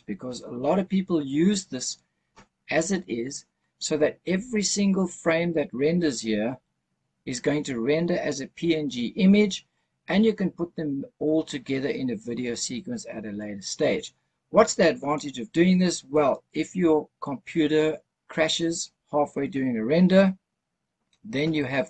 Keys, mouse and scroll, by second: 12.8-13.7 scroll up 2, 13.7-15.8 scroll up 1, 15.8-16.7 scroll up 1.